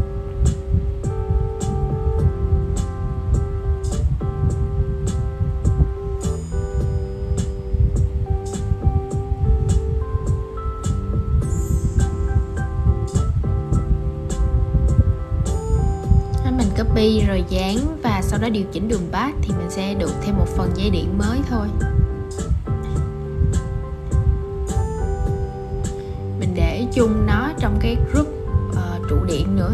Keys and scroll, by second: 7.6 super+x, 8.9 shift+super+v, 24.3 super+{.